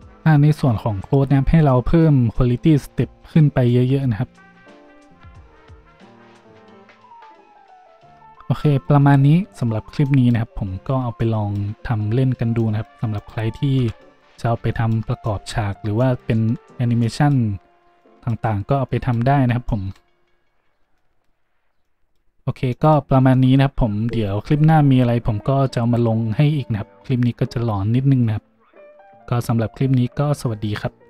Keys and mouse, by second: 8.1 a, 13.1 right click, 13.8 a.